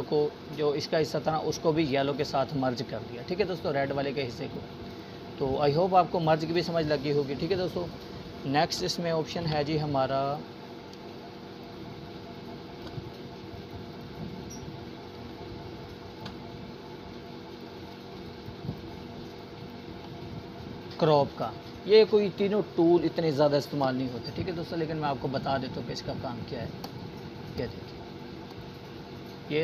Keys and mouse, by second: 5.3 Delete, 5.7 click, 5.9 Delete, 6.7-11.8 drag, 12.3-13.0 alt+shift+drag, 23.3 alt+click, 23.4 alt+click.